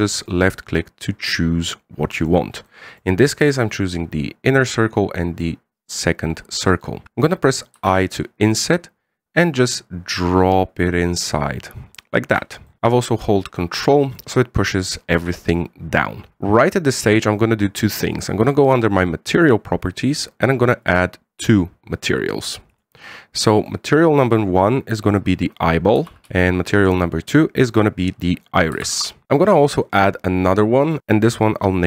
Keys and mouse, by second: 1.2-3.1 middle drag, 3.5 middle click, 7.0 middle click, 8.6 i, 12.8 middle click, 14.5 middle click, 20.2 click, 21.7 click, 23.5 click, 24.1 click, 24.4-29.7 drag, 26.4 l, 30.7 click, 31.3 click, 31.6-31.8 drag.